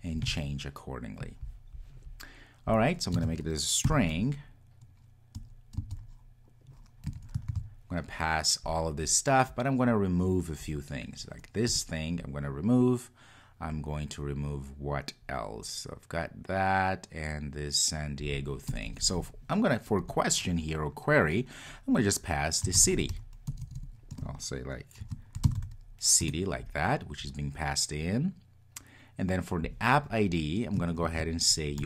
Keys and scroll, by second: 7.5 super+v, 26.3 Return.